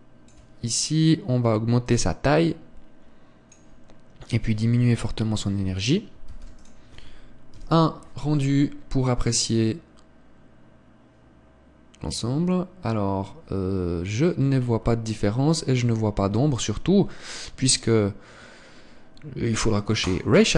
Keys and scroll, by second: 7.2 ctrl+s, 17.5 Escape.